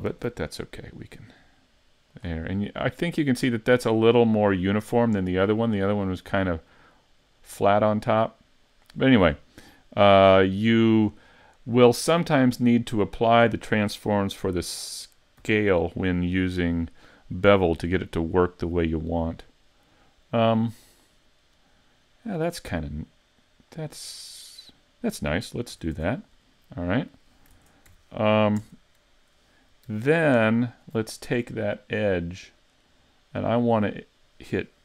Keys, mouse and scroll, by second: 0.1 ctrl+b, 2.6 middle click, 5.0 middle click, 6.7 middle click, 15.4 n, 16.0 middle click, 19.1 click, 20.9 click, 21.4 middle click, 25.7 a, 26.0 Tab, 26.1-26.6 scroll down 4, 26.6 middle click, 27.6 ctrl+Tab, 27.9 2, 28.6 Tab, 30.7 alt+right click, 31.2 middle click.